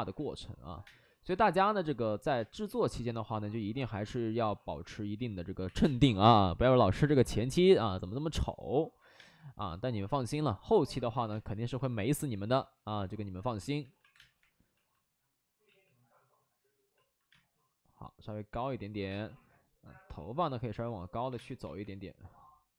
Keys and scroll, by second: 0.0-0.8 typing, 2.3 space, 5.1 2, 5.6 3, 5.7 space, 6.0 3, 6.9 ctrl+z, 9.1 space, 11.2 space, 13.5 3, 13.8 alt+s, 14.0 3, 14.3 3, 14.3 space, 14.7 alt+s, 15.6 ctrl+z, 17.2 space, 19.0 space, 19.3 w, 21.2 3, 21.3 space, 21.6 3, 21.7 3.